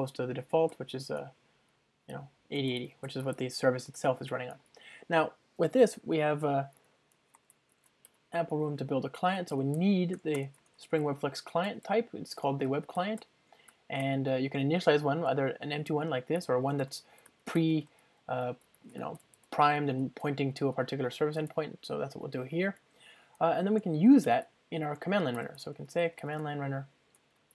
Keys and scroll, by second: 1.2 Return, 3.9 alt+super+l, 8.7 Return, 10.6 ctrl+space, 12.5 Return, 25.1 Return, 25.8 Return.